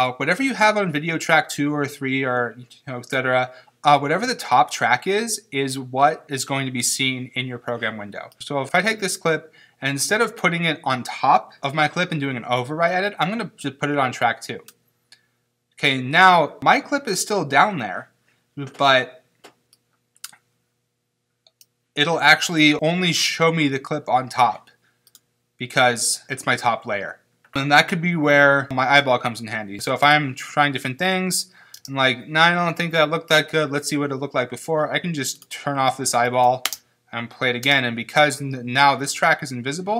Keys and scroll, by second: 29.8 space, 35.4 space, 36.7 space.